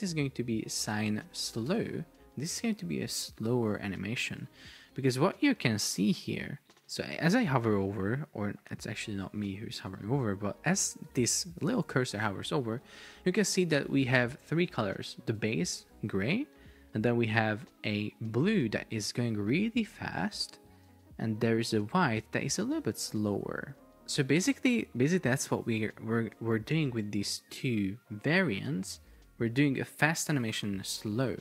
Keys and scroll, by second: 0.0 Left, 0.5 alt+Delete, 1.3 shift+s, 1.7 Return, 4.6 super+Tab, 6.6 space, 22.7 space, 25.2 space, 25.9 super+Tab.